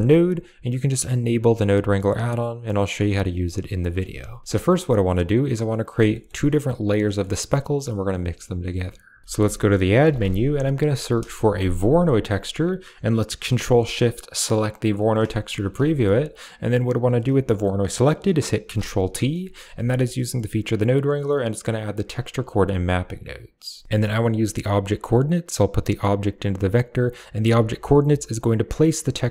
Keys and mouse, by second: 3.6 middle click, 3.9 a, 4.2 click, 4.4 middle click, 5.5 click, 5.9 click, 6.9 click, 9.2 shift+a, 12.3 click, 14.7 ctrl+shift+click, 15.1 click, 15.8 shift+middle click, 16.6-17.0 drag, 17.5 middle click, 18.5 ctrl+t, 18.9 middle click, 19.5 a, 19.7 middle click, 20.6 click, 21.8 click, 24.0 click, 25.5-26.5 drag, 28.0 click, 29.2 middle click.